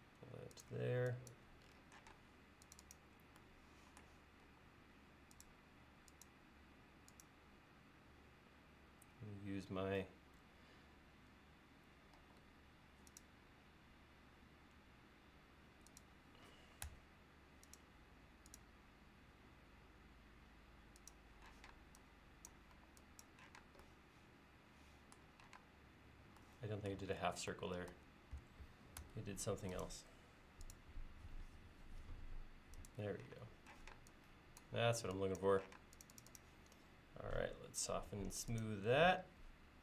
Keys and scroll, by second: 0.8 e, 2.2 space, 4.5 l, 6.6 l, 10.5 Page_Down, 16.9 a, 21.6 p, 22.8 e, 25.6 space, 27.3 super+z, 29.1 a, 33.4 space, 33.8 p, 34.9 e.